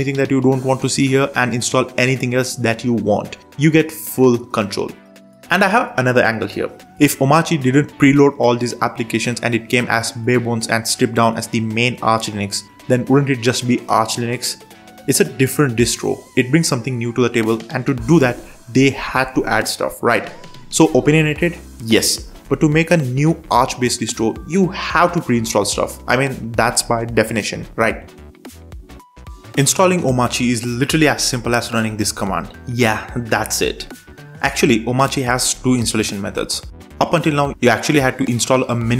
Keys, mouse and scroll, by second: 33.7 ctrl+shift+super+space, 34.5 Down, 34.6 Down, 34.7 Down, 34.8 Down, 35.0 Down, 35.4 Return, 37.8 super+3.